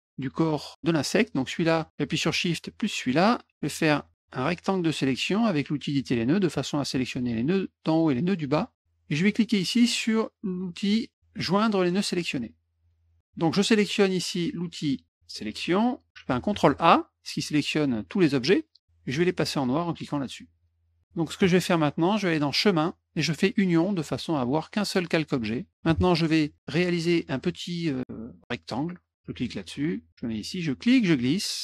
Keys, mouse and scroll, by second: 1.2 click, 3.0 shift+click, 4.5-6.5 drag, 12.8 click, 15.1 click, 16.5 ctrl+a, 20.5 click, 22.5 click, 23.9 click, 29.3 click, 30.7-31.6 drag.